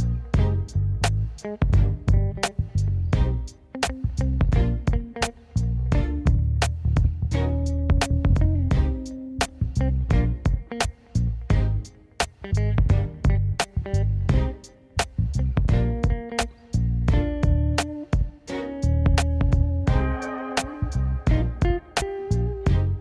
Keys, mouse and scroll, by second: 1.5 scroll up 1, 2.6 click, 4.5-6.1 middle drag, 6.1 `, 7.2-8.3 shift+middle drag, 8.8 alt+d, 12.8-16.2 typing, 14.5 click, 15.3 click, 16.0 click, 17.4 drag, 17.6-19.0 middle drag, 19.4-20.2 shift+middle drag, 20.2 scroll down 2, 20.5 middle drag, 20.7 scroll up 2, 20.9-21.4 middle drag, 21.4-21.8 scroll up 1, 21.8-23.0 shift+middle drag.